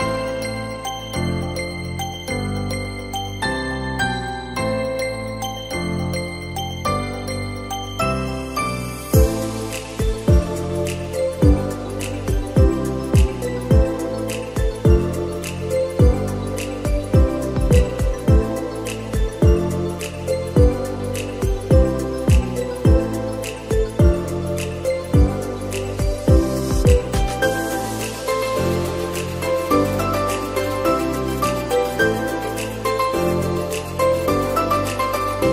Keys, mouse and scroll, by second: 0.3 middle click, 1.1 click, 2.2 middle click, 3.1 s, 4.2 middle click, 4.5-5.8 scroll up 3, 5.8 click, 7.3 middle click, 7.8 s, 9.6 middle click, 9.9-10.4 scroll up 2, 10.4 click, 11.7 e, 12.2 click, 13.5 middle click, 14.1 s, 15.7 click, 16.3 s, 17.1 click, 18.3 s, 19.3 f, 19.6 middle click, 20.2-21.2 scroll up 1, 21.2-23.2 drag, 23.2 scroll up 1, 25.8 click, 26.7 click, 27.1 alt+shift+click, 27.6 alt+shift+click, 28.6 ctrl+b, 30.6 middle click, 31.1 click, 31.4 alt+shift+click, 31.7 alt+shift+click, 32.4 alt+shift+click, 33.0 alt+shift+click, 33.5 middle click, 34.2 alt+shift+click, 34.9 alt+shift+click.